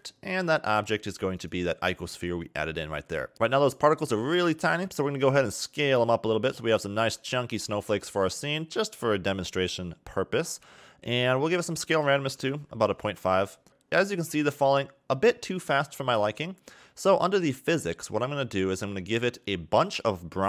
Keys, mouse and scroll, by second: 0.1-0.8 scroll down 6, 1.1 click, 3.3 scroll down 3, 5.1 click, 11.0 click, 11.7 click, 13.7-14.1 scroll up 4, 14.3 KP_0, 15.0 scroll up 1, 17.4 click.